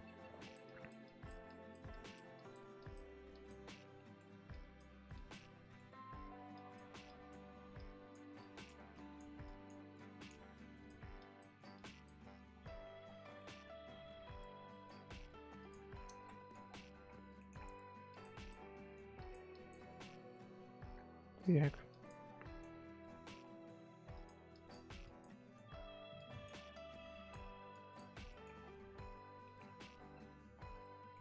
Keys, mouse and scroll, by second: 0.4-3.9 drag, 3.9 middle click, 4.5-5.5 drag, 5.5 middle click, 5.9-6.5 scroll up 2, 6.5-12.5 drag, 12.5 scroll down 1, 12.6 middle click, 13.0-13.3 scroll down 10, 13.3 middle click, 13.9-15.5 scroll up 10, 14.7 middle click, 15.5 click, 16.1 ctrl+z, 16.3 middle click, 16.5 scroll up 1, 16.6-17.0 scroll down 7, 17.0 scroll up 3, 17.3 scroll down 1, 17.5-18.1 scroll up 3, 18.1 click, 18.8 middle click, 19.1 click, 19.9 middle click, 20.1 scroll up 3, 20.4-21.9 middle drag, 21.9 click, 22.2 scroll down 5, 22.4 middle click, 22.8-23.3 scroll up 3, 23.3-23.7 scroll down 3, 23.7-24.1 scroll up 1, 24.1-25.3 drag, 25.3 middle click, 25.7-26.1 scroll up 2, 26.1-28.3 drag, 28.3 middle click, 28.5-28.9 scroll down 12, 28.9 middle click, 29.6-30.7 scroll up 9, 30.7 middle click.